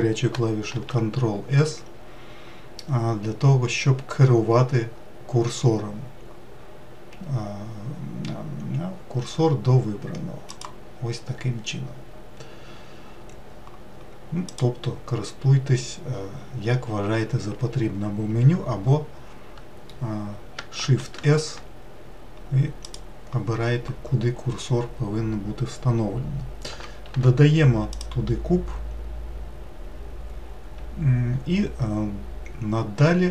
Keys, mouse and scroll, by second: 0.6 shift+s, 14.4-17.5 drag, 20.7 shift+s, 27.0 shift+a.